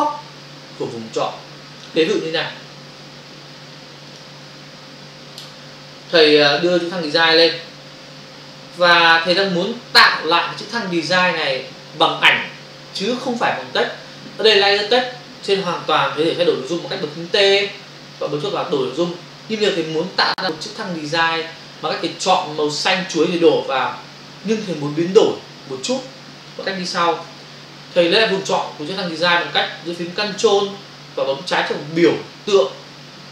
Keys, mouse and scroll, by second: 4.2 click, 6.0 click, 6.5 click, 7.1 double click, 7.9 v, 8.5 click, 18.2 click, 19.6 Escape.